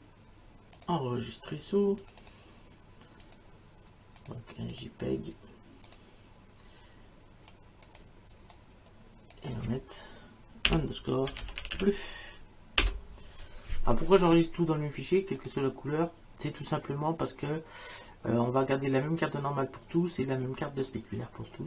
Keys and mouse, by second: 0.8 click, 2.0 click, 5.9 click, 7.5 click, 10.7-12.3 typing, 12.8 Return, 15.4 click.